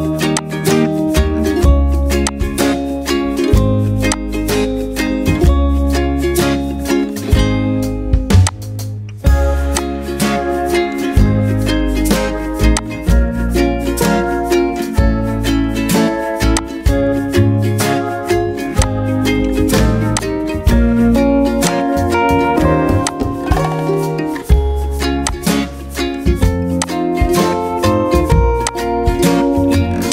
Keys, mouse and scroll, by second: 21.7 shift+click.